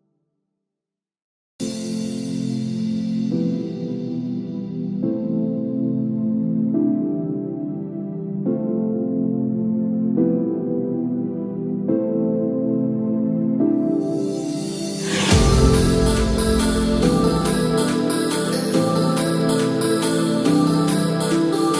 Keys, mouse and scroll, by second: 12.7 click.